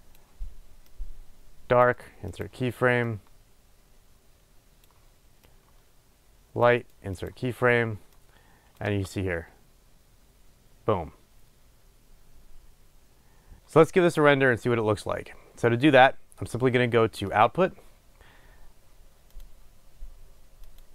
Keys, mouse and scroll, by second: 2.7-3.5 right drag, 3.5-7.6 drag, 7.6-8.5 right drag, 8.5-20.9 drag, 9.1 space, 13.6 space.